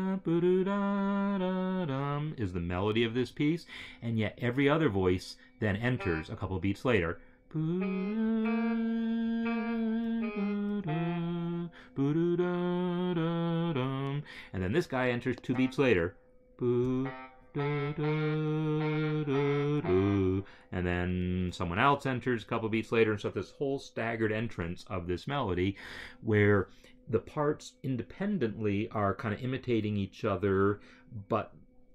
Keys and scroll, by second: 7.5 Right, 8.3 Right, 9.3 Right, 10.1 Right, 10.7 Right, 17.3 Right.